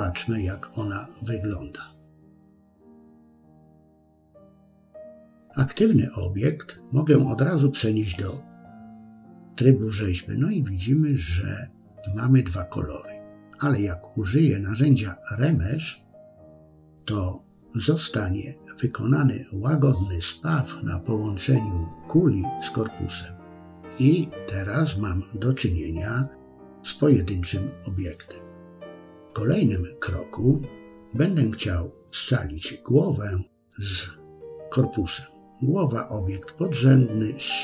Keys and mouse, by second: 0.7-1.3 middle drag, 5.3 Tab, 11.4-15.5 drag, 15.9-20.5 middle drag, 21.2 KP_3, 22.5 shift+middle click, 23.3-24.8 middle drag, 25.5 KP_3, 30.4 Tab, 34.0 click.